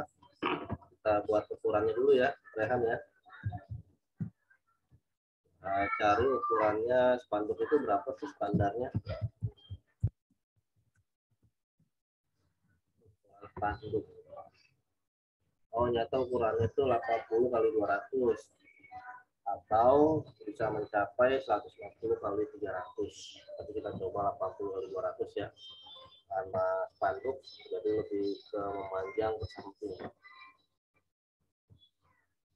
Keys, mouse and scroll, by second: 2.5 click, 3.4 typing, 4.2 Return, 7.6 click, 8.9 s, 10.5 u, 16.4 scroll up 1, 16.6 scroll, 30.8 click.